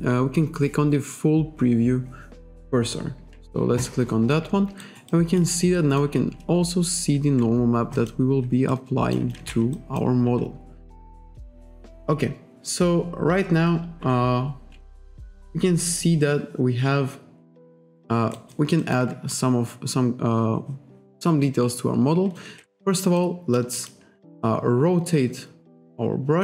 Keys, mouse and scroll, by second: 3.8 click, 4.9 alt+right click, 5.8 alt+click, 8.0 click, 8.8 alt+click, 9.5 ctrl+z, 9.8 alt+click, 10.7-11.9 scroll up 1, 12.0-12.4 scroll up 1, 12.8-13.6 scroll up 1, 14.5-15.0 scroll up 1, 15.8-16.2 scroll up 1, 16.3-17.1 scroll up 1, 17.5 scroll up 1, 17.7-18.1 scroll down 1, 18.4 alt+right click, 18.9 alt+click, 19.4 ctrl+click, 22.5 ctrl+z, 23.2 alt+click, 23.8 alt+click, 24.5 ctrl+click.